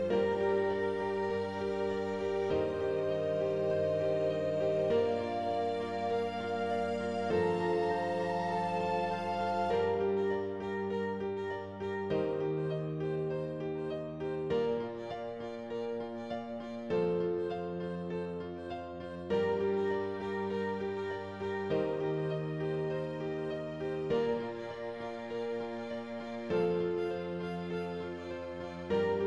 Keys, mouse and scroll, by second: 0.1 middle click, 0.6 Tab, 1.0 Left, 1.1-2.0 scroll down 6, 2.0 KP_7, 2.8 Left, 3.1 shift+middle click, 3.6 scroll up 2, 3.9 g, 5.3 shift+middle click, 5.9 click, 6.1 shift+middle click, 6.5 scroll down 2, 6.6 g, 7.8 middle click, 8.5 scroll up 2, 8.8 middle click, 9.6 Tab, 9.9-11.0 middle drag, 11.0 click, 11.3 Tab, 12.0 scroll up 2, 12.8 click, 13.3 scroll down 1, 14.1 shift+click, 15.0 x, 15.3 scroll down 2, 15.6 ctrl+s, 15.8 a, 16.4 shift+d, 17.3 scroll down 1, 17.5-19.3 middle drag, 19.3 shift+d, 20.9-21.3 scroll down 1, 21.3-22.2 scroll up 1, 22.2 KP_0, 23.6 click, 24.0 g, 26.1 scroll up 1, 26.8 alt+a, 28.6 scroll down 1.